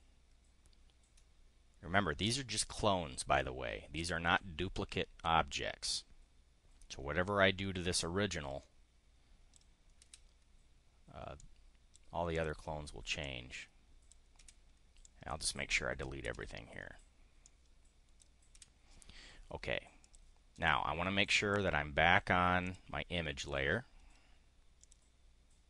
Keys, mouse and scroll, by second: 8.1-9.2 drag, 9.9 Delete, 11.3 click, 12.2 click, 13.1 click, 14.3 Delete, 14.9-15.7 drag, 15.9 Delete, 16.9-17.5 drag, 18.1 Delete, 20.0 click, 21.3 click, 22.6 click, 23.3 click, 24.7 click.